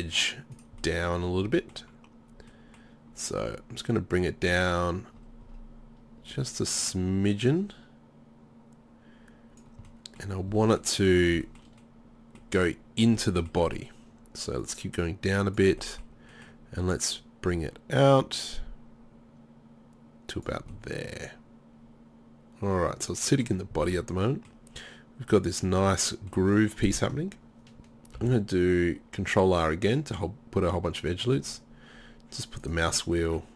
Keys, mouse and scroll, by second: 0.6 click, 0.6 right click, 0.9 middle click, 1.0 click, 1.0 right click, 1.0-1.6 scroll up 1, 3.2-9.7 drag, 9.7 middle click, 10.0 middle click, 11.1 middle click, 12.1 middle click, 16.0-20.8 middle drag, 20.9 middle click, 21.1 middle click, 21.3 middle click, 21.8 middle click, 23.8 middle click, 24.2-26.4 middle drag, 28.2 ctrl+r, 32.9-33.5 middle drag.